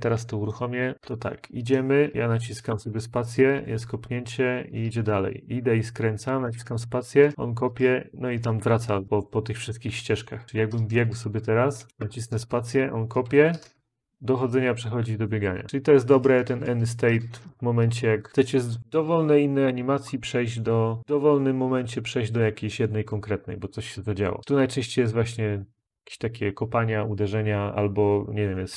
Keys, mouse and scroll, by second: 1.4-2.5 Up, 4.8 Up, 4.8-6.1 Left, 7.3 Left, 10.4 Left, 10.4-11.6 Up.